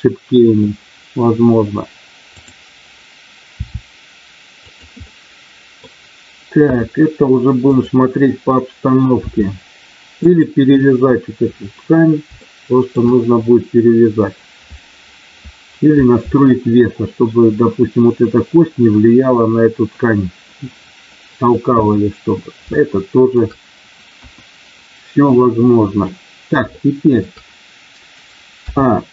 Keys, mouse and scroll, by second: 2.4 click, 3.5 r, 4.6 click, 5.1 middle click, 7.6 click, 9.3 r, 10.3 click, 12.4 shift+middle click, 22.7 shift+middle click, 24.1 KP_1, 26.7 shift+middle click.